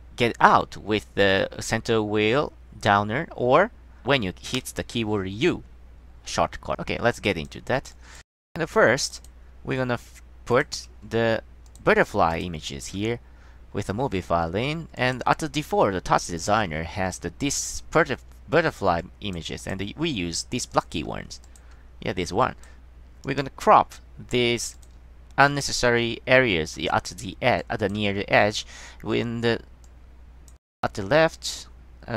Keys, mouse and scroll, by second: 2.3 click, 3.6 scroll up 1, 4.7 d, 6.7 click, 7.3 click, 7.6 click, 8.0 click, 9.2 click, 9.3 click, 10.7 click, 11.8 click, 12.4 click, 12.8 click, 15.1 click, 19.1 click, 19.7 click, 20.8 click, 21.6 click, 22.1 scroll up 2, 22.5 drag, 23.4 click, 24.9 click, 25.6 click, 27.7 click, 28.4 scroll up 1, 30.0 click, 31.7 click.